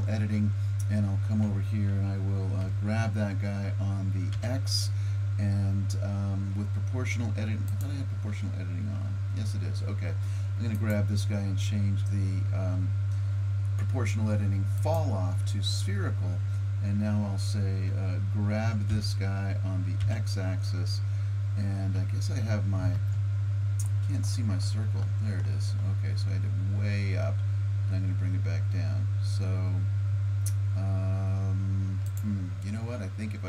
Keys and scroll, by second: 2.6 g, 18.9 g.